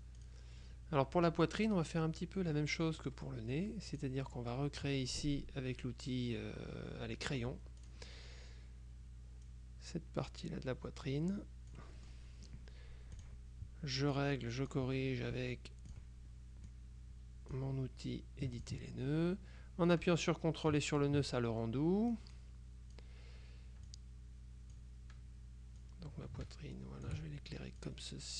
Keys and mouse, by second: 3.1 click, 3.2 click, 4.0 click, 7.9 click, 9.6-12.7 drag, 13.3 click, 14.2-15.3 drag, 16.0 click, 16.8-18.1 drag, 18.7 ctrl+click, 21.0 ctrl+click, 22.2-23.6 drag, 24.0-25.4 drag, 25.9-27.6 drag, 27.9-28.3 drag.